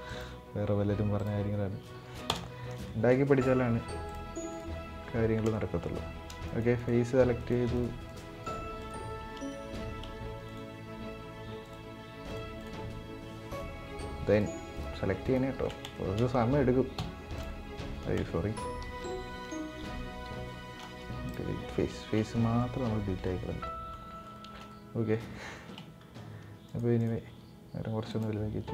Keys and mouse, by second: 2.6 shift+middle click, 3.8 click, 5.2-5.6 shift+middle drag, 6.1 shift+right click, 6.5 shift+right click, 7.1 shift+right click, 7.5 shift+right click, 8.1 shift+right click, 8.6 shift+right click, 9.2 shift+middle click, 9.5 click, 9.5 right click, 10.1 shift+right click, 11.4 shift+right click, 12.0 shift+right click, 12.3 shift+right click, 13.3-13.8 shift+right drag, 14.1 shift+right drag, 15.0 shift+right click, 15.6 shift+middle click, 16.7 Delete, 18.6 ctrl+z, 20.0 Delete, 21.7 shift+middle drag, 22.1 middle click, 22.5 Tab, 23.0-23.4 middle drag, 23.6-24.0 middle drag, 24.1 shift+middle click, 24.4-24.8 middle drag, 25.3-25.9 shift+middle drag, 26.4 right click, 26.7 right click, 27.0 s, 28.3 s.